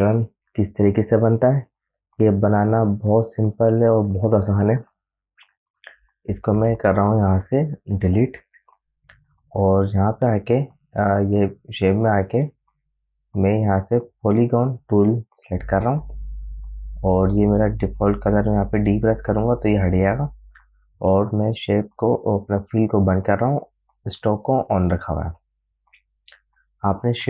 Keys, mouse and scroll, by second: 3.4 click, 3.6 click, 12.6 right click, 16.0 click, 19.6 d, 23.5 click.